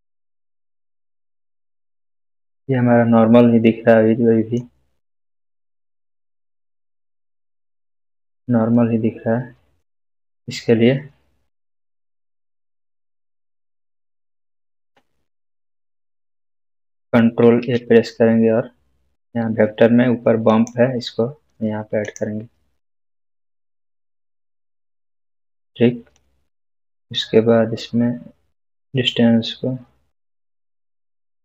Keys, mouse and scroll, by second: 2.4 click, 2.4-3.0 scroll up 1, 3.6-4.5 middle click, 5.5-6.2 scroll down 1, 6.6 click, 7.8 scroll up 1, 8.7-10.0 middle drag, 11.3 scroll up 1, 11.5-12.1 middle click, 12.3-14.1 scroll down 1, 17.4 scroll down 1, 20.4 shift+a.